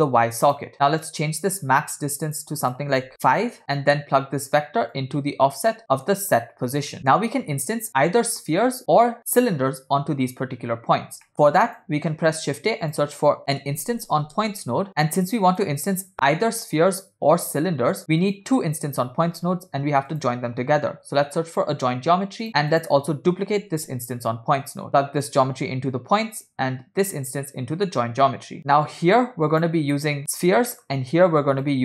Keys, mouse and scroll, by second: 0.0 click, 0.7 scroll up 1, 1.5 click, 2.6 click, 3.8 scroll down 1, 3.9 middle click, 5.1-5.7 drag, 5.8 middle click, 6.9 middle click, 7.9 scroll up 3, 8.8 scroll down 2, 11.3 middle click, 11.4 click, 12.3 shift+a, 15.2 click, 18.0 scroll up 3, 18.2 click, 19.2 shift+a, 22.8 click, 23.8 shift+d, 25.3-26.6 drag, 27.2-28.6 drag, 28.6 middle click, 28.6 scroll down 1, 29.2 click, 30.0-30.3 drag, 30.8 middle click, 31.7-31.8 drag.